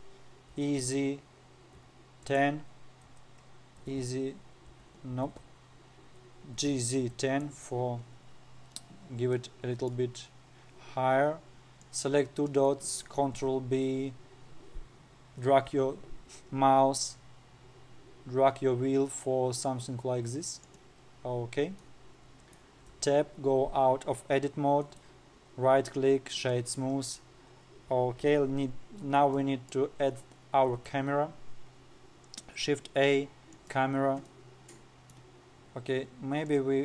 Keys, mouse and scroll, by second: 0.4-0.8 scroll down 1, 1.0 e, 5.8 ctrl+z, 7.1 g, 8.6 scroll up 1, 9.9-11.4 middle drag, 11.4-11.9 scroll down 5, 11.9-12.3 scroll up 2, 12.3 click, 13.9 ctrl+b, 22.4-23.5 middle drag, 23.5 Tab, 25.4-27.9 right drag, 27.9-28.5 scroll down 2, 28.5-29.2 scroll up 1, 29.2-29.9 scroll down 1, 29.9-30.5 middle drag, 30.5-31.2 scroll down 1, 31.3 shift+a, 34.8-36.0 middle drag, 36.0-36.8 scroll down 3.